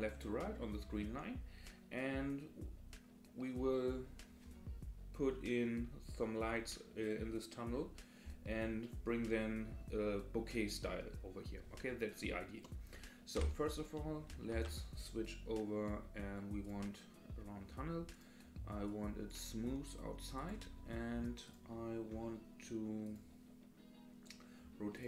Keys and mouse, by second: 13.4 Delete, 13.7 click, 14.5 shift+a, 18.2 click, 18.8 click, 20.4 click, 23.1 click.